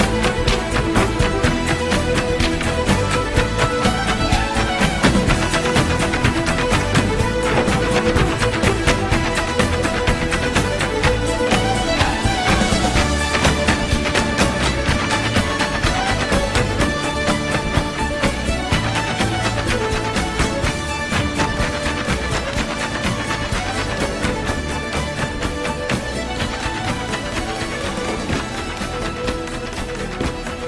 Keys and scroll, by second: 9.8 super+j, 23.8 super+j.